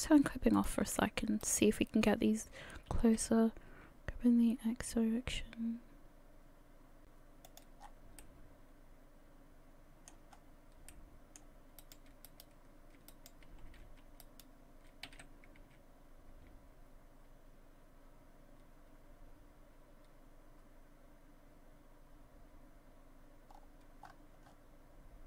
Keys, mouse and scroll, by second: 0.6 click, 1.4 shift+right click, 3.1 g, 7.8-8.2 scroll down 6, 8.2 middle click, 10.3-10.9 scroll up 4, 11.3 middle click, 11.8 right click, 12.3 shift+right click, 13.1 right click, 13.7 f, 14.2 right click, 15.1 g.